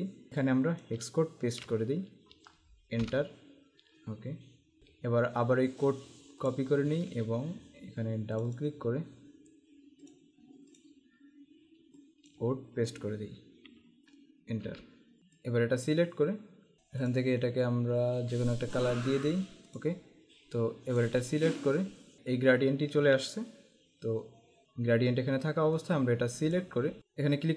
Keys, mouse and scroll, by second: 1.5 ctrl+v, 3.1 Return, 4.8 Tab, 6.6 click, 7.0 alt+Tab, 8.5 click, 10.2 click, 12.1 click, 13.4 ctrl+v, 14.8 Return, 15.5 click, 17.2 click, 18.8 click, 25.9 click, 27.0 z.